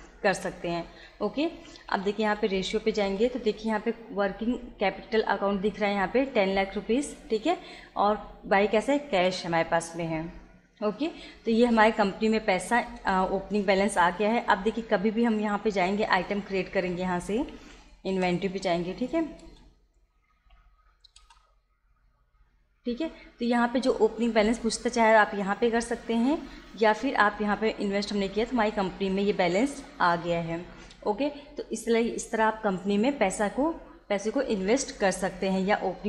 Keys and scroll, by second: 1.6 Down, 3.1 Return, 12.8 Escape, 16.3 Down, 17.0 Up, 17.6 Down, 18.1 Return, 18.8 Down, 19.5 Return, 21.3 Return, 26.4 Escape.